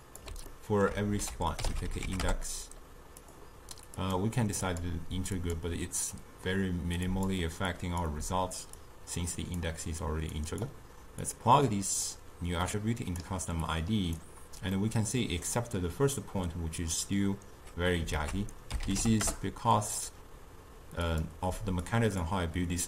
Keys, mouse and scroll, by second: 0.6 ctrl+middle click, 1.3 ctrl+a, 4.1-7.8 drag, 8.8 click, 10.4 click, 11.3-13.8 drag, 14.8-17.9 middle drag, 18.2 ctrl+a, 21.9-22.8 drag.